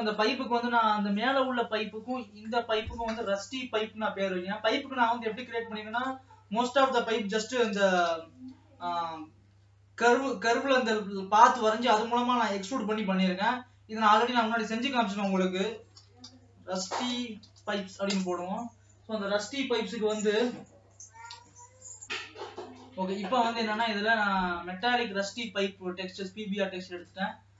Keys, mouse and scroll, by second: 0.6 click, 27.1 click.